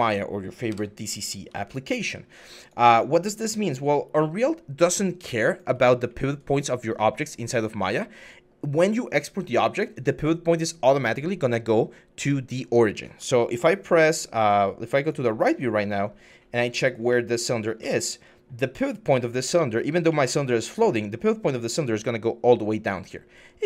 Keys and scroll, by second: 15.4 4.